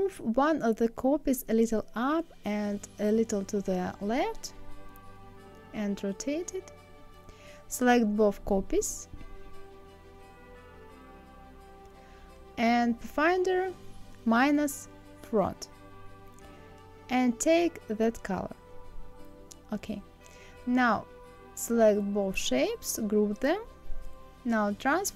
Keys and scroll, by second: 0.4 Up.